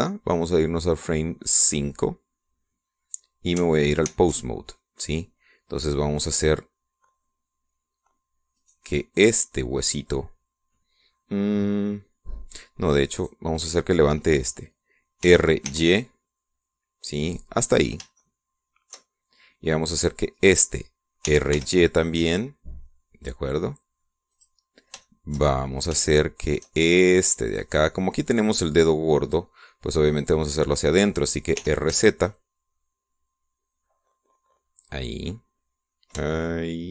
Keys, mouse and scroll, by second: 2.3 click, 4.9 ctrl+Tab, 9.4 right click, 13.9 right click, 16.0 r, 16.5 y, 18.5 click, 19.0 shift+right click, 21.2 right click, 22.1 r, 22.3 y, 25.1 click, 25.8 shift+middle click, 26.4-26.8 shift+scroll up 1, 26.9 shift+middle click, 28.5 right click, 32.4 r, 32.7 z.